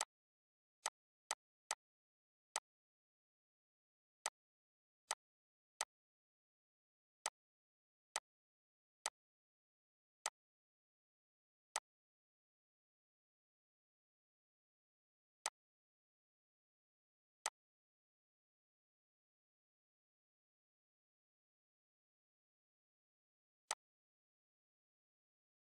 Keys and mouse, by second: 9.9 click, 13.6 g, 15.1 click, 23.3 click.